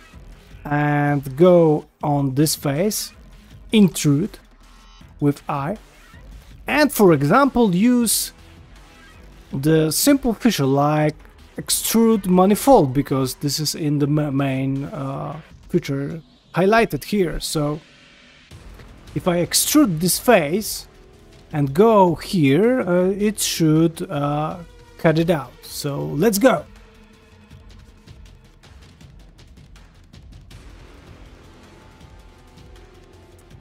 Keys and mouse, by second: 1.4 3, 1.7 click, 2.0 middle click, 2.5 shift+middle click, 2.8 ctrl+middle click, 3.8 i, 6.3 ctrl+middle click, 9.4-12.2 drag, 15.4 middle click, 16.0 shift+middle click, 16.3 ctrl+middle click, 17.9 ctrl+middle click, 18.3 middle click, 18.8 ctrl+middle click, 19.0 ctrl+middle click, 19.5 ctrl+middle click, 19.9 ctrl+middle click, 20.9 middle click, 22.6 middle click, 23.2 shift+middle click, 23.5 middle click, 26.6 click, 28.5-33.6 middle drag.